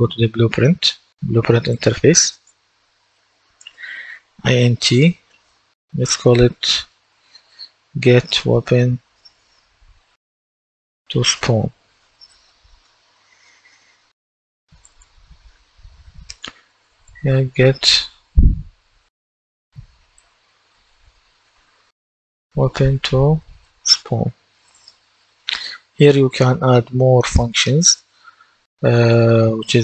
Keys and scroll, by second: 7.1-9.6 typing, 10.6-12.3 typing, 12.7 Return, 16.6-21.8 typing, 23.5-25.2 typing, 25.4 Return.